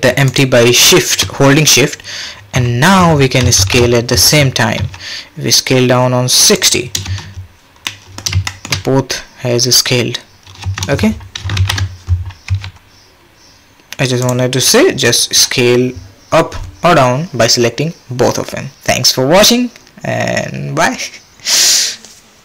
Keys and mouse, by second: 0.3 shift+click, 3.5 shift+Left, 4.8 s, 7.1 space, 8.5 shift+drag, 10.6 space, 11.5 shift+Left, 12.5 s.